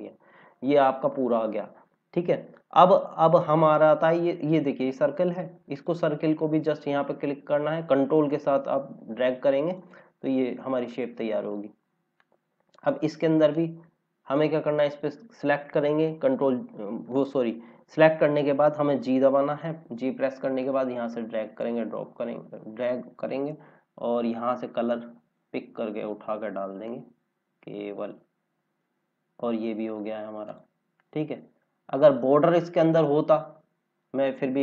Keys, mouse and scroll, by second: 1.1 click, 1.5 scroll down 1, 4.2 scroll up 1, 5.7 click, 14.0 scroll up 1, 14.7 click, 19.1 g, 20.5 g, 20.5 click, 31.3 scroll down 1, 32.5 scroll up 1, 33.4 scroll down 1, 34.0 scroll up 1.